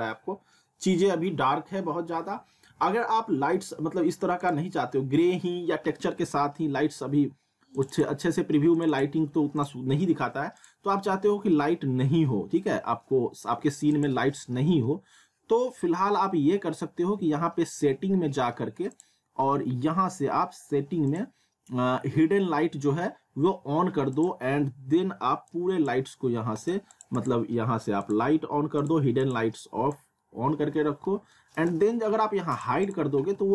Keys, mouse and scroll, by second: 4.4 click, 7.8 click, 9.0 click, 9.8 click, 11.1 alt+w, 13.9 click, 18.9 click, 24.1 click, 24.5-24.9 scroll down 1, 25.5 click, 26.6 right click, 26.9 click, 30.2 middle click, 32.5 click, 33.1 alt+w.